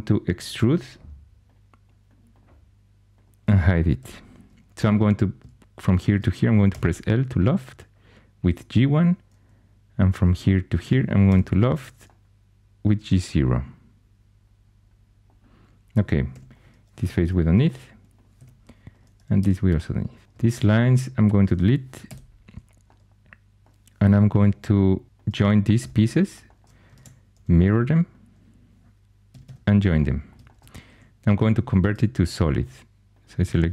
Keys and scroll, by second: 0.5 e, 3.9 h, 6.6 l, 11.2 l, 16.3 3, 17.1 shift+x, 18.3 2, 19.3 x, 20.2 2, 22.0 x, 24.0 4, 25.7 j, 26.9 alt+x, 29.2 typing, 30.9 2.